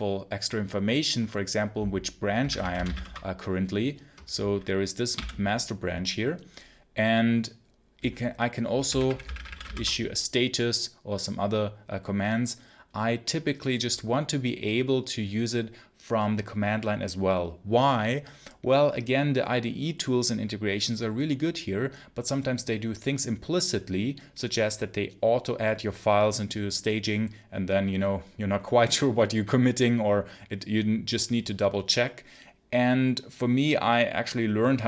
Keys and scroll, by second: 2.0-3.3 typing, 5.0 q, 8.5-10.0 typing.